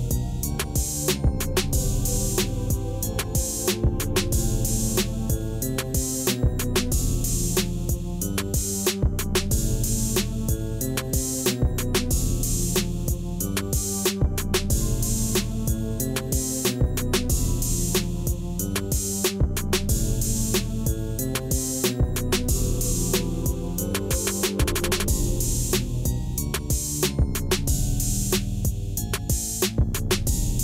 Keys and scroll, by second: 1.0 shift+z, 5.5 Tab, 10.0 r, 10.6 Return, 16.8 ctrl+shift+t, 23.0 Tab, 23.5 a, 27.0 Tab.